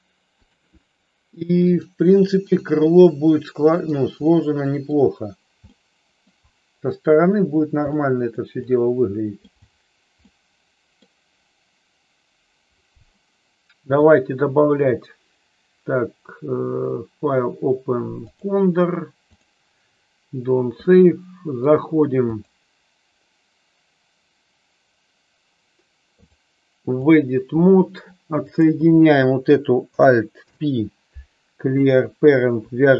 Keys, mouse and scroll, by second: 0.4-1.7 drag, 2.4 click, 2.9-3.8 middle drag, 4.2-4.8 middle drag, 5.7 middle click, 7.9 middle click, 8.5 middle click, 10.3 middle click, 14.0-20.0 drag, 20.9 middle click, 22.3 click, 26.2-27.2 drag, 28.4 click, 30.4 alt+p.